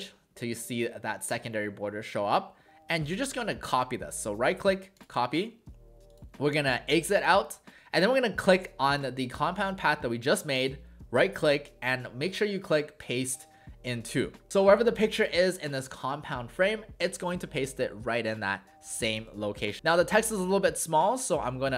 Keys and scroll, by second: 19.3 w.